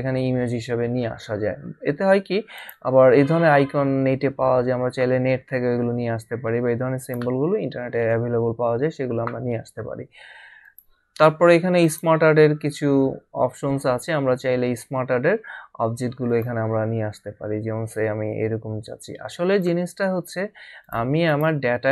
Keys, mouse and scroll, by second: 2.6 click, 7.0 click, 10.6 click, 13.6 scroll down 1, 16.4 click, 18.1 scroll down 1, 19.5 click.